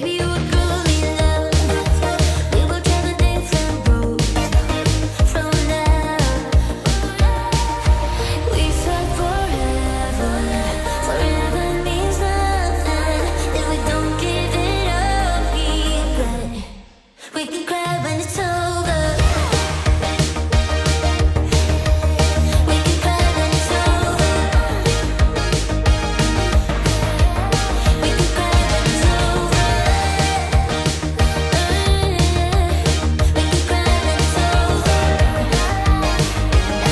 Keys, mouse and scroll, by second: 3.2 space, 6.9 space, 7.7-10.7 drag, 9.1-10.7 shift+drag, 11.1-11.5 drag, 16.6 space, 19.3 space, 21.5-28.8 drag, 28.8-34.4 drag, 35.9 typing, 36.1 Return.